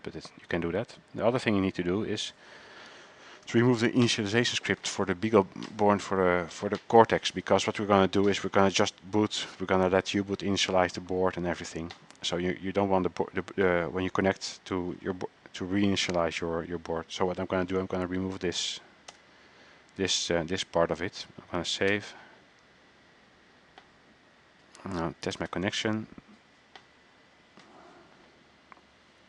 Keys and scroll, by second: 18.4 ctrl+a.